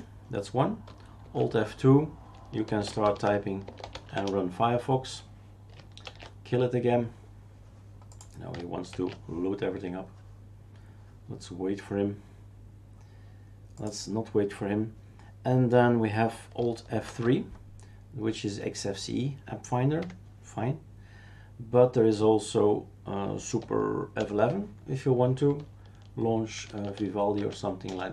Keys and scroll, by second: 1.2 alt+F2, 2.4-4.4 typing, 6.0 shift+super+q, 8.9 shift+super+q, 17.0 alt+F3, 20.0 Escape, 24.2 super+F11, 26.4-28.1 typing.